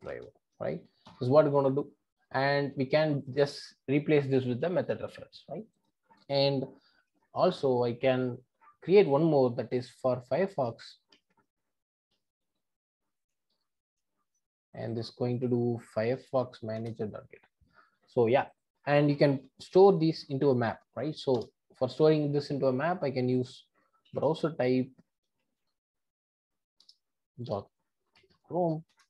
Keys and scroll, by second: 2.6 alt+Return, 16.8 Return, 21.4 Return, 26.9 Return.